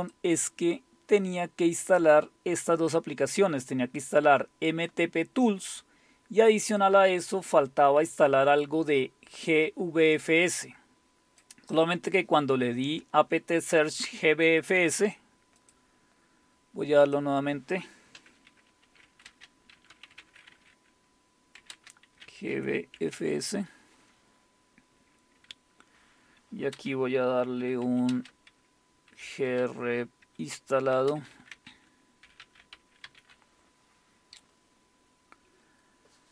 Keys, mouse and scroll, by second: 0.2 click, 1.8 click, 4.1-6.2 drag, 6.6 click, 10.3-12.1 drag, 15.6 click, 17.0-18.7 drag, 18.4-23.6 typing, 25.9 Up, 26.7 space, 27.8-33.6 typing, 36.1-36.3 typing.